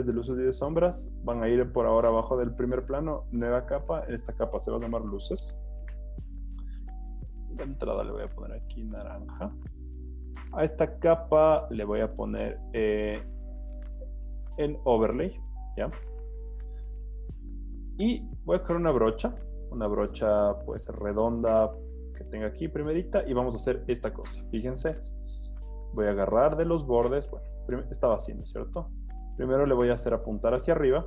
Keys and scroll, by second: 5.1-6.3 typing, 16.2 z, 18.2 b.